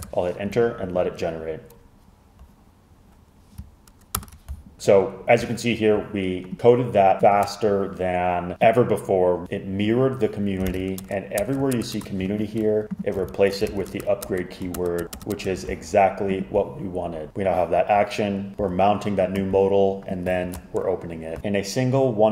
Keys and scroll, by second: 0.0-0.1 typing, 3.3 typing, 4.3 super+Return, 10.8 super+f, 11.1 Return, 11.5 Return, 12.0 shift+Return, 12.3 Escape, 13.4 alt+shift+Right, 13.8 super+f, 14.0 Return, 14.3 Return, 14.8 shift+Return, 15.4 Return, 15.7 Escape, 20.5 shift+super+Left.